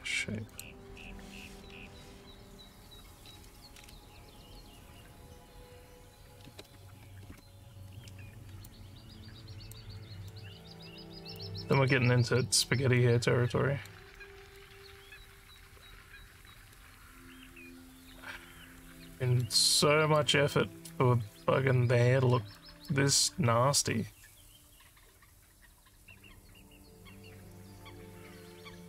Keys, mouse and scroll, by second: 0.5 click, 8.7-9.8 alt+drag, 10.4 alt+middle click, 11.2 alt+scroll down 1, 11.4 alt+click, 12.0 scroll down 2, 12.4 alt+middle click, 13.0 alt+click, 14.2 alt+middle click, 15.6-16.8 alt+middle drag, 18.1 alt+middle click, 19.2 alt+middle click, 19.7 alt+click, 20.5 alt+middle click, 22.6 alt+middle click.